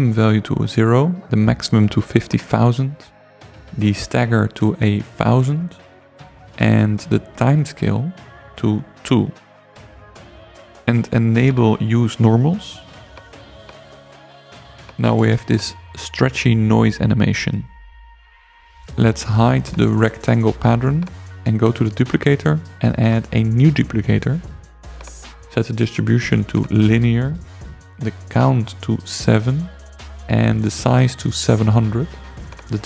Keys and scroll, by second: 0.3 5, 0.7 0, 1.5 Return, 4.6-5.0 typing, 6.2 Return, 9.0 typing, 15.8 space, 28.8 7, 29.6 Return, 30.7 7, 31.1 0, 31.8 Return.